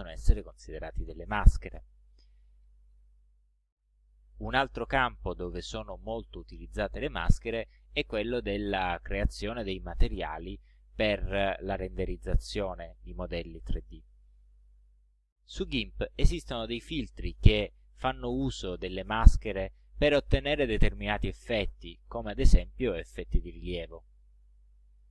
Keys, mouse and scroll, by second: 1.5 click.